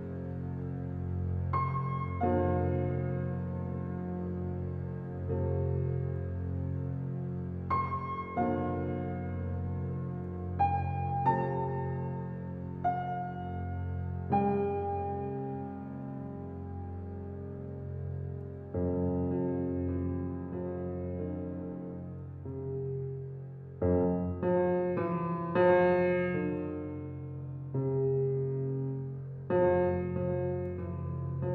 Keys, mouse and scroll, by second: 0.7 ctrl+a, 3.8 Tab, 4.3 alt+middle click, 5.1 s, 6.7-7.6 middle drag, 7.8 alt+middle click, 8.2 shift+middle click, 8.4 scroll up 2, 8.6-9.0 shift+middle drag, 9.0 Tab, 10.0 alt+z, 10.6 click, 11.6 click, 12.6 g, 14.4 click, 14.9 click, 15.8 click, 16.5 g, 18.3 middle click, 18.8 scroll down 1, 19.0 Tab, 19.7 alt+z, 19.9 scroll down 1, 20.2-20.9 middle drag, 20.9 g, 22.7 click, 22.9 scroll down 2, 23.1-24.6 middle drag.